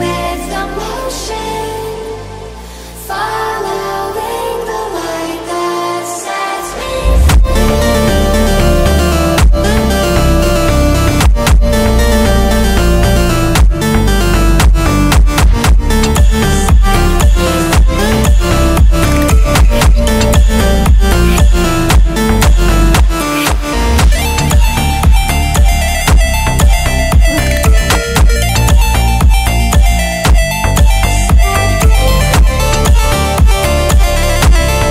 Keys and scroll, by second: 0.1 ctrl+2.